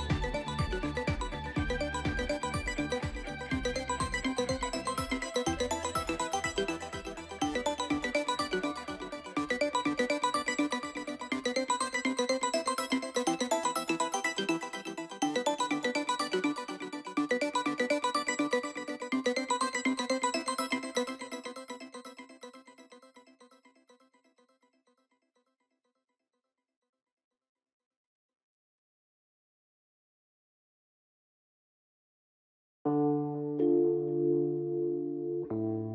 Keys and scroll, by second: 15.2 ctrl+z, 27.6 ctrl+z.